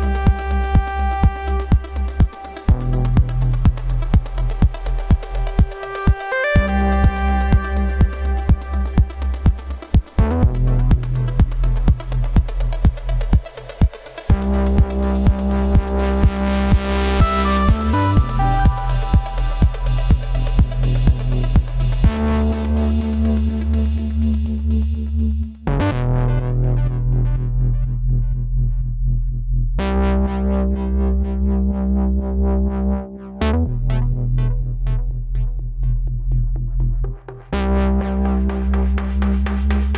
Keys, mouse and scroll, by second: 1.7 ctrl+click, 6.8 ctrl+t, 8.5 alt+shift+click, 12.6 alt+shift+click, 17.8 right click, 19.1 right click, 23.9 right click, 28.1 double click, 29.2-30.6 typing, 32.8 double click, 33.9-34.8 typing.